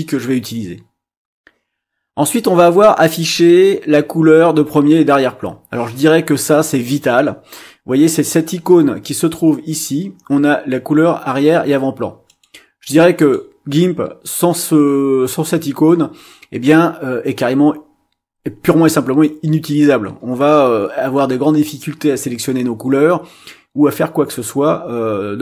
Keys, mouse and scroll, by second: 12.2 click, 13.2 click.